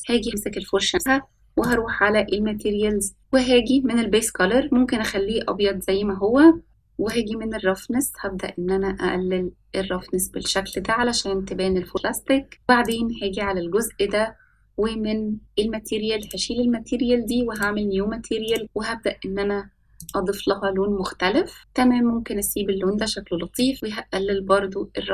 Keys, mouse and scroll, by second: 0.0 middle click, 1.4 click, 3.2 click, 9.1-12.5 drag, 15.4 click, 18.6 click, 19.9-21.0 drag.